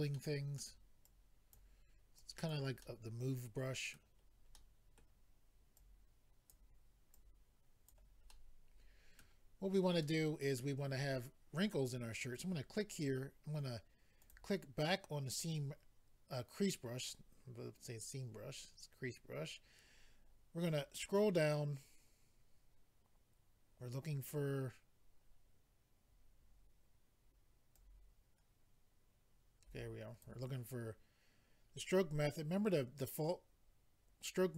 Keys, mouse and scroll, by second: 0.1 middle click, 1.1 click, 2.2 click, 2.8 middle click, 4.5 middle click, 5.8 click, 7.1 click, 8.3 middle click, 9.6-10.0 scroll up 1, 10.0 middle click, 10.9-11.8 scroll up 1, 12.3 click, 12.4 click, 14.2 click, 14.3 click, 18.4 scroll down 1, 19.0 scroll down 1, 19.6 scroll down 1, 20.1 scroll down 1, 20.6 scroll down 1, 23.8-24.4 scroll down 2, 24.4 scroll down 2, 24.6-25.0 scroll up 1, 25.2 scroll down 1, 27.7 click.